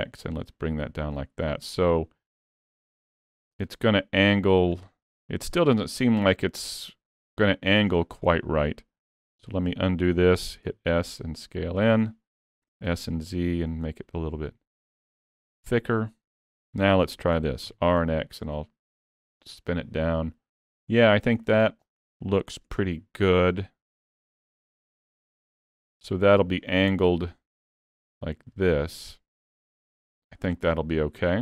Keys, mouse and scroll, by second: 1.5 middle click, 5.0 middle click, 5.7 scroll down 3, 6.0 middle click, 8.1 scroll up 2, 8.4 shift+middle click, 9.5 ctrl+z, 10.6 s, 12.8 s, 15.6 middle click, 17.4 r, 19.6 middle click, 21.5 middle click, 22.7 r, 26.9 KP_3, 29.8 scroll down 2, 30.4 scroll up 3, 30.8 middle click.